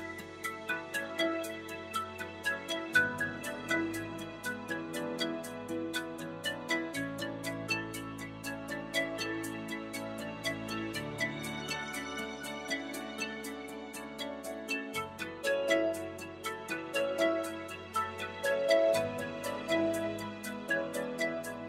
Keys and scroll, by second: 0.0-1.4 typing, 17.3-19.0 typing, 20.6 shift+-, 21.3 0.